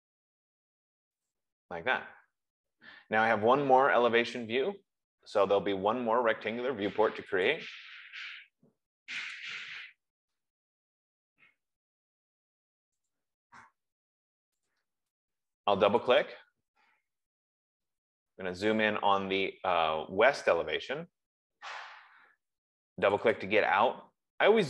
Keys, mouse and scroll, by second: 1.6 click, 3.8 F15, 7.9 click, 10.3 click, 13.4 click, 15.2 click, 16.4 click, 16.6 click, 17.3-17.8 scroll, 18.0-19.2 scroll, 19.9 scroll, 21.2-21.5 scroll, 23.5 click, 23.8 click.